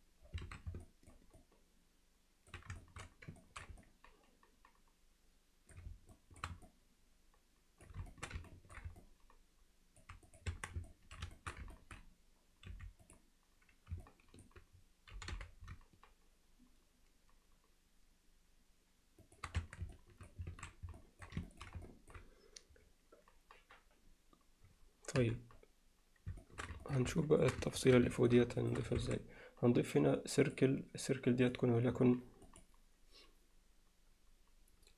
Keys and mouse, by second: 0.5 alt+a, 0.8 alt+middle click, 1.4-2.5 alt+middle drag, 2.8 alt+shift+middle drag, 3.4 ctrl+alt+middle drag, 3.8-5.7 middle drag, 6.1 alt+shift+middle drag, 6.7-7.9 alt+middle drag, 8.1 alt+shift+middle click, 8.5 ctrl+alt+middle drag, 9.0-10.0 middle drag, 10.3 click, 10.5 Tab, 10.9 alt+middle click, 11.4 alt+shift+middle click, 11.8 ctrl+alt+middle click, 12.7 3, 13.0 click, 14.1 alt+middle click, 15.1 g, 19.6 Tab, 19.9-20.3 middle drag, 20.5 alt+a, 21.0 alt+middle drag, 21.5 ctrl+alt+middle click, 21.9 alt+middle drag, 25.2 KP_7, 26.4 alt+shift+middle drag, 26.9 ctrl+alt+middle click, 27.2 alt+shift+middle drag, 27.7 middle click, 28.1 alt+shift+middle click, 29.0 shift+a, 31.4 click, 32.5-34.9 drag.